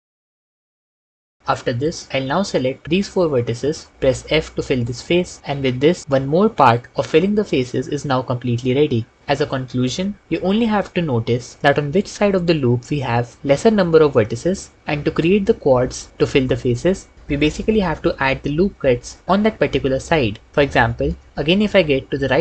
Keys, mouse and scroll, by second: 0.0-1.1 typing, 4.9 f.